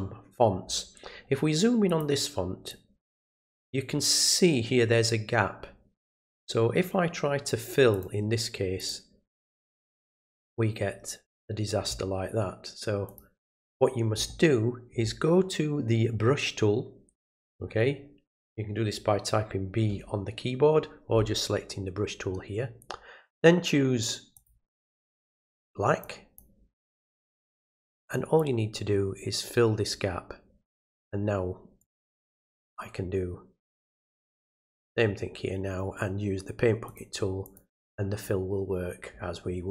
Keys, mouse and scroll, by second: 1.8 click, 2.7 click, 7.9 click, 8.8 click, 13.0 click, 24.3 click, 26.0 click, 27.0 click, 28.3-30.7 drag, 31.8-33.8 drag, 34.4 click, 36.8 click, 37.4 click.